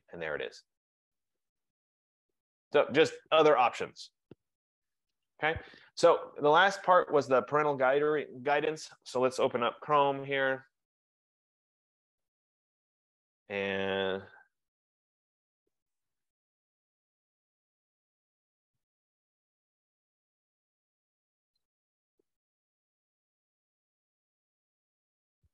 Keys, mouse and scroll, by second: 5.7 F15, 8.2 click, 9.6-11.0 typing, 13.0-16.5 typing, 13.3 click, 18.6-24.7 typing, 24.7 Return.